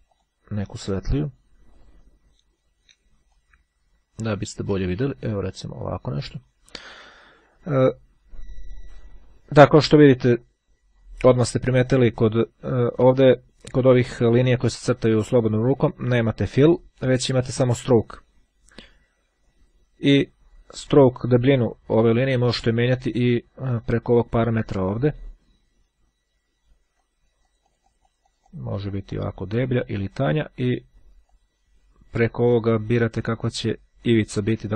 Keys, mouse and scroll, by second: 1.9 click, 3.5-5.0 drag, 5.3-6.7 drag, 22.6 click, 26.9-29.9 drag, 30.3 click, 31.5 click, 32.3 click, 33.9 click, 34.6-34.7 ctrl+scroll down 2.